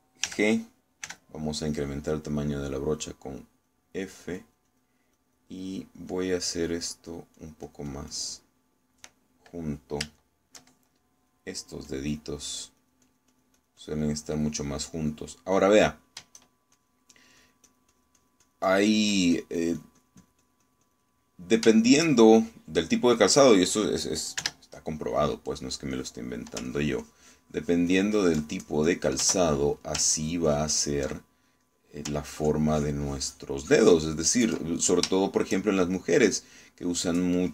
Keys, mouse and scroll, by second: 1.3 g, 2.1 f, 2.8 click, 3.5 click, 4.5 click, 5.1 click, 6.2 click, 6.7 click, 7.1-8.4 drag, 9.5 middle click, 11.3 shift+middle click, 12.1 shift+click, 12.7 click, 13.5-15.1 drag, 15.9 click, 16.8 middle click, 17.8-22.2 shift+drag, 22.2 middle click, 22.9 shift+middle click, 23.5 shift+middle click, 24.5 middle click, 25.5 3, 26.3 middle click, 27.0 click, 27.7 ctrl+click, 28.7-30.3 ctrl+drag, 31.2 ctrl+click, 33.4 ctrl+click, 34.1-35.7 ctrl+drag, 35.7-36.7 ctrl+middle drag, 36.9 ctrl+shift+middle click.